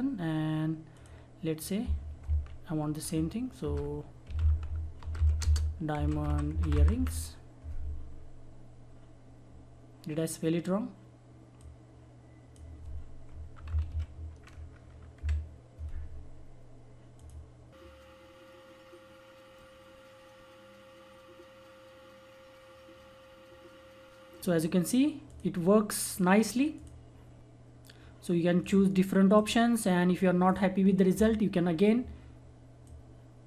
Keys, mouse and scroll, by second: 3.6-7.4 typing, 11.6-13.7 drag, 13.4-14.4 typing, 15.1 Delete, 17.1 click, 25.2 click, 32.8-33.4 drag.